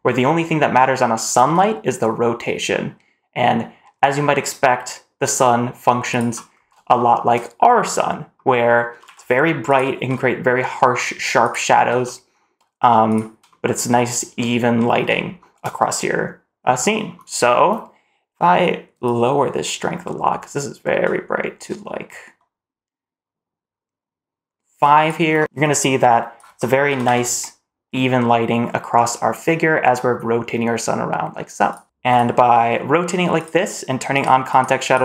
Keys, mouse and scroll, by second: 1.1 r, 6.4 scroll up 1, 6.8 shift+middle drag, 7.7-8.2 middle drag, 8.7 r, 9.8 r, 11.6 r, 13.3 shift+middle drag, 13.8-14.6 middle drag, 14.8-15.2 scroll up 2, 15.2 shift+middle drag, 15.6 scroll down 1, 18.9-25.0 drag, 25.4 middle click, 25.5 click, 26.7 r, 31.8 middle click, 31.8 r, 32.3 r, 34.0 click, 34.7 click.